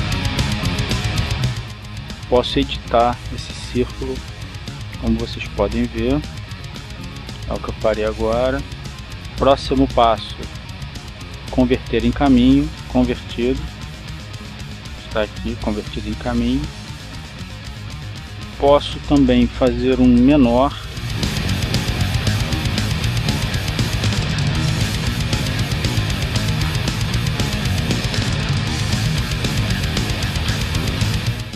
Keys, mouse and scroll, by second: 0.7 click, 3.3 click, 4.9-7.7 drag, 7.8 click, 10.3 click, 12.1 click, 13.2 click, 14.7 click, 18.9 click, 21.8-23.5 ctrl+shift+drag, 24.9 click, 25.8 click, 27.4 click, 28.5 click, 29.3 click.